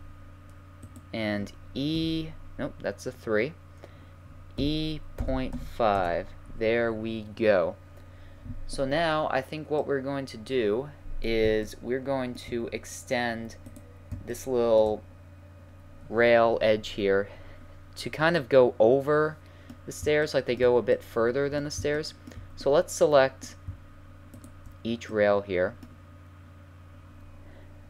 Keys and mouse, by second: 0.1 right click, 0.9 right click, 1.9 3, 4.6 e, 9.8-13.7 middle drag, 13.7-14.7 right drag, 14.7-16.6 middle drag, 16.6-18.5 middle drag, 18.6 middle click, 24.4-26.2 middle drag, 26.7 middle click.